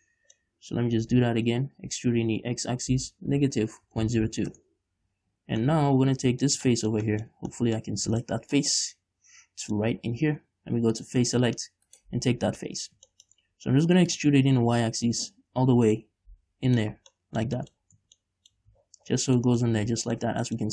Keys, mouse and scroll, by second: 1.4 f, 2.2 e, 4.9 Return, 5.8 scroll down 2, 5.9-8.6 middle drag, 8.2-8.6 scroll up 2, 9.1-11.3 middle drag, 11.3 click, 12.2 right click, 12.7 scroll down 2, 13.0-14.4 middle drag, 14.4-17.3 drag, 17.3 scroll down 2, 17.5 middle click, 18.1 scroll up 2, 18.3 Tab, 18.5 middle click, 18.9 a, 19.1-19.7 scroll down 2, 19.5-20.7 middle drag.